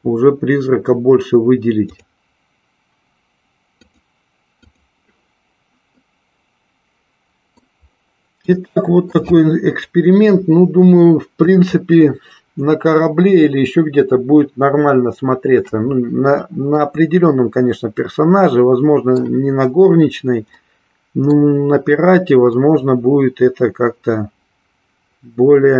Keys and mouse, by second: 1.9 click, 6.0-7.6 middle drag, 8.6 shift+middle click, 16.7-19.2 middle drag, 20.6 middle click, 22.7-25.7 middle drag.